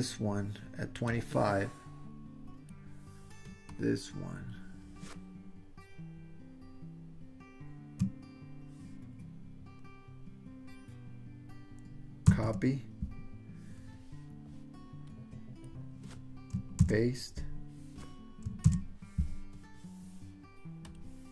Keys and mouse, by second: 1.2-2.8 drag, 3.7-10.8 drag, 12.3 super+c, 15.2 click, 16.8 super+v, 18.7 super+v, 20.9 click.